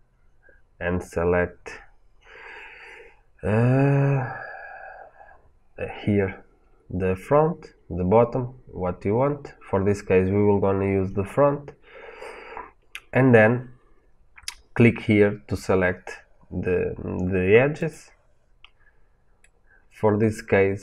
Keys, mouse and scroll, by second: 19.3-20.8 middle drag.